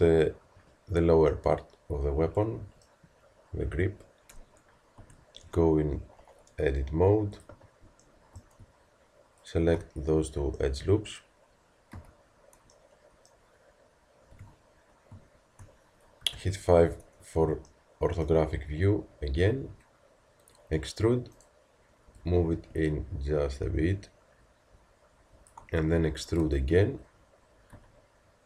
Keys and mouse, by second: 5.0 Tab, 7.3-10.8 drag, 11.9 z, 14.3 KP_1, 16.2 KP_5.